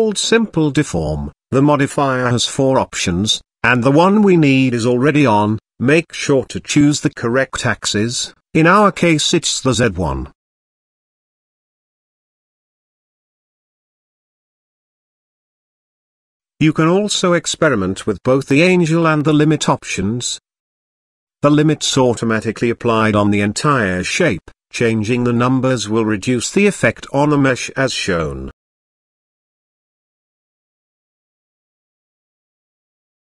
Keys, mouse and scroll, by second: 6.6-7.6 drag, 8.7-9.9 middle drag, 10.2 shift+middle click, 10.6-11.3 scroll up 2, 11.3-14.7 middle drag, 15.0-15.3 shift+middle drag, 16.3-19.3 drag, 19.9 ctrl+z, 22.2-22.5 scroll down 1, 22.5 middle click, 27.2-28.4 drag, 28.7 middle click.